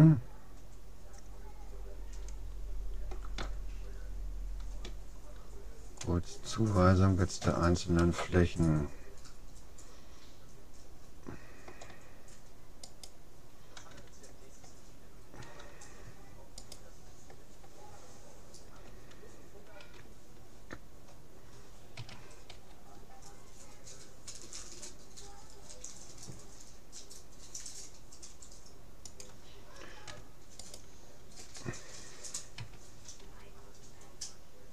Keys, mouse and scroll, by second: 4.0-6.0 middle drag, 8.0-9.8 middle drag, 13.0-14.6 right drag, 16.6-18.4 right drag, 22.0 a, 22.6 g, 30.6-32.2 right drag, 32.6 a, 33.2 g.